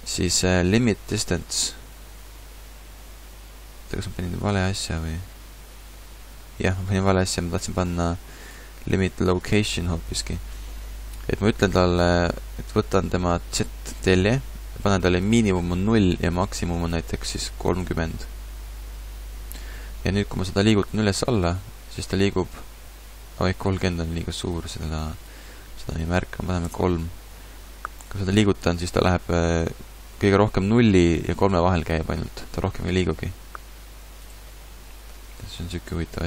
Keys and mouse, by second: 13.7-18.7 drag, 20.1 right click, 20.4 middle click, 21.2-23.2 right drag, 21.2 g, 24.3 right click, 26.8-28.0 drag, 28.0-29.8 right drag, 28.2 g, 34.3-36.2 right drag, 35.2 g.